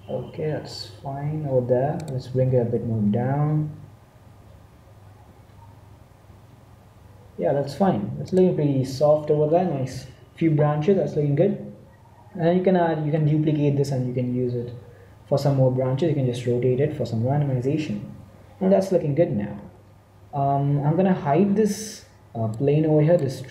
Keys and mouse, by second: 2.3 g, 19.2 z, 19.3 z, 22.3-23.5 drag.